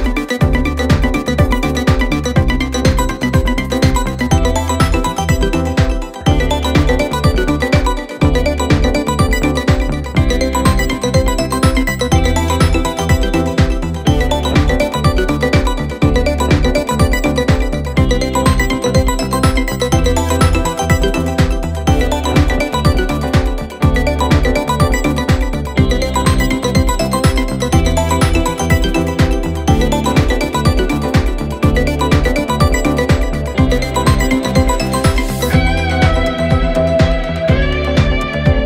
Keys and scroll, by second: 2.9 ], 14.2 ctrl+z, 15.3 4, 23.9 4, 25.9 ctrl+d, 26.3 Escape.